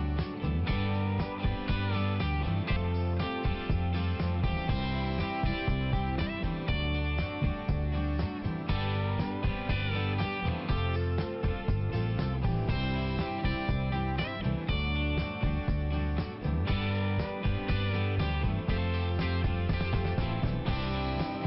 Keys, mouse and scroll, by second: 0.8 click, 1.2 click, 1.3 double click, 1.6 double click, 1.7 double click, 1.8 double click, 1.9 double click, 2.2 double click, 2.8 ], 2.9 click, 3.0 ], 3.1 click, 3.3 ], 3.5 click, 3.6 click, 3.7 click, 3.9 click, 4.0 double click, 4.2 double click, 4.3 double click, 4.5 double click, 4.6 double click, 4.9 double click, 5.1 double click, 5.3 double click, 5.4 double click, 5.7 double click, 6.3 click, 6.4 click, 6.6 click, 6.8 double click, 7.1 double click, 7.1 double click, 7.3 double click, 7.4 double click, 7.6 double click, 7.7 double click, 8.0 double click, 8.1 double click, 8.2 double click, 8.4 double click, 8.5 double click, 8.6 double click, 8.9 double click, 9.0 double click, 9.3 double click, 9.4 double click, 9.8 double click, 9.9 double click, 10.1 double click, 10.2 double click, 10.5 double click, 10.6 double click, 10.7 double click, 10.9 double click, 11.0 double click, 11.2 double click, 11.5 double click, 11.5 double click, 11.7 double click, 11.8 double click, 12.2 double click, 12.3 double click, 13.2 double click.